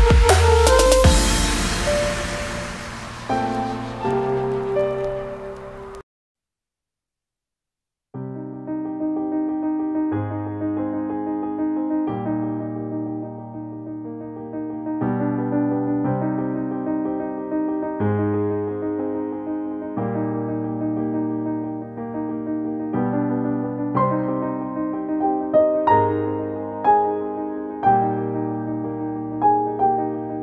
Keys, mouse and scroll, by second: 0.0 space, 2.1 space, 5.0 ctrl+shift+z, 9.0 ctrl+shift+z, 10.0-14.6 alt+drag, 14.1 v, 14.6 space, 15.1 space, 15.3-17.8 ctrl+drag, 18.6 click, 21.2 click, 23.2 space, 23.3 click, 24.8 ctrl+z, 25.8 click.